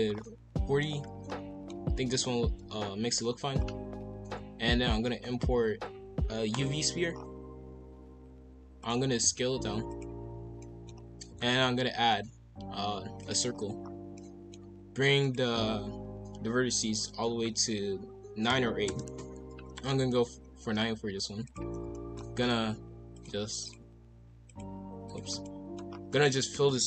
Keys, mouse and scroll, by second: 0.1 scroll down 4, 0.8-1.7 middle drag, 1.7-2.7 typing, 3.6-4.1 scroll up 1, 4.1 shift+a, 7.1-8.1 scroll down 5, 8.1 g, 9.2 s, 10.3 scroll up 1, 10.6-10.9 shift+middle drag, 10.9-11.4 scroll up 2, 11.4 shift+a, 13.5-14.1 scroll down 4, 14.1-15.2 middle drag, 15.2-18.2 drag, 19.8 KP_5, 20.0 KP_1, 20.7 g, 21.8-23.1 scroll up 3, 21.9 shift+middle drag, 23.1-25.4 drag, 25.4 middle click, 25.9 scroll down 2, 26.1 middle click, 26.5 f.